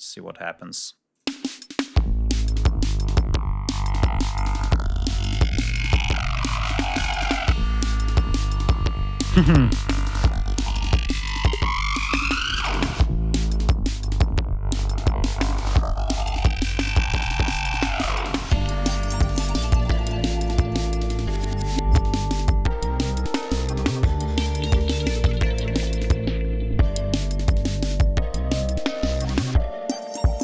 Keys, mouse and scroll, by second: 0.1 ctrl+scroll down 2, 0.9 click, 1.1 space, 2.4 ctrl+scroll down 2, 2.7 ctrl+scroll up 2, 7.6 ctrl+scroll down 2, 8.1 ctrl+scroll up 2, 12.9 ctrl+scroll down 2, 13.2 ctrl+scroll up 2, 14.1 ctrl+scroll up 2, 19.4-19.7 scroll up 2, 19.8-20.4 ctrl+scroll down 3, 20.6-21.0 ctrl+scroll up 1, 21.2-21.5 scroll down 1, 23.1-23.5 scroll up 1, 23.7 ctrl+scroll up 2, 24.2 ctrl+scroll down 2, 25.1 ctrl+scroll down 2, 25.8-26.6 scroll down 4, 26.9 ctrl+scroll up 2, 27.3 ctrl+scroll down 2, 29.0-29.7 scroll up 4.